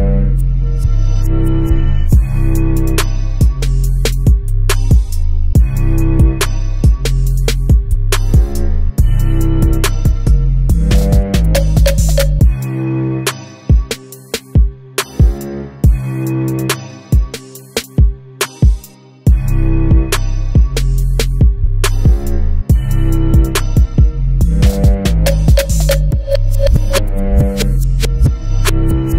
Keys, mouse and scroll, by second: 0.0-11.8 middle drag, 0.4 scroll down 1, 11.5-11.8 scroll up 1, 11.8 click, 12.5 KP_Decimal, 13.3 shift+right click.